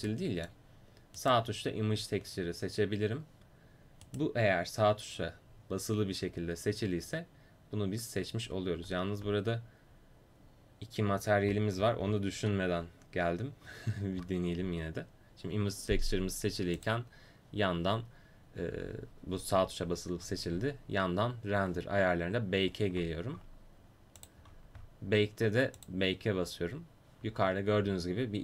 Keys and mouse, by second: 1.2 click, 2.2-16.8 right drag, 16.8-28.4 drag, 24.2-28.4 middle drag.